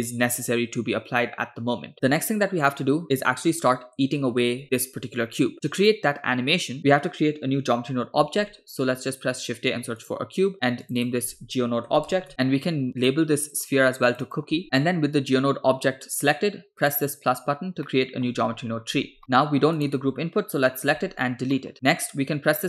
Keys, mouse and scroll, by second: 8.4 shift+a, 10.9-12.3 drag, 13.0 click, 13.5 click, 14.1 click, 16.9 click, 17.9 middle click, 18.6-19.2 scroll down 4, 19.2 middle click, 19.2-19.8 scroll up 6, 19.8 click, 21.0 x, 21.6 middle click.